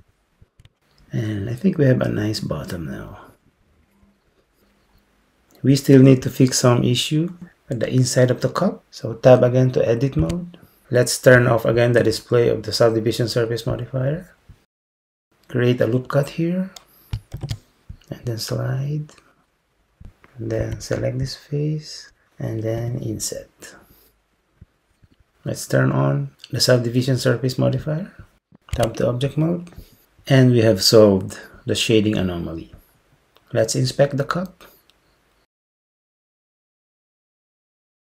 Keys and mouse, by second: 0.6 Tab, 8.8 Tab, 10.3 Tab, 13.8-15.0 drag, 17.4 ctrl+r, 20.7 3, 21.3-22.8 drag, 22.8 i, 28.8 Tab.